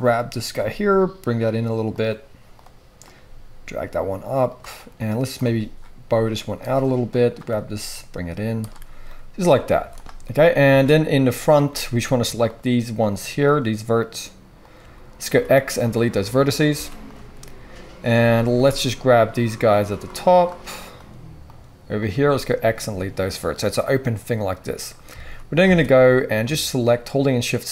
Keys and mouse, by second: 0.5 g, 2.0-11.4 drag, 3.1 g, 5.4 g, 7.5 g, 9.7 z, 10.6 alt+a, 11.4 middle click, 11.5 click, 12.4 shift+middle click, 12.5 shift+click, 13.0 shift+middle click, 13.7 shift+click, 13.9 shift+middle click, 14.0-19.5 shift+drag, 15.2 x, 16.7 x, 19.5 middle click, 19.6 shift+click, 20.0 shift+middle click, 20.1-22.8 shift+drag, 22.2 x, 22.8-25.6 middle drag, 25.6 alt+click, 25.6 alt+a, 25.9 middle click, 26.0-27.1 drag, 27.1 shift+middle click, 27.1 shift+click, 27.6 shift+middle click.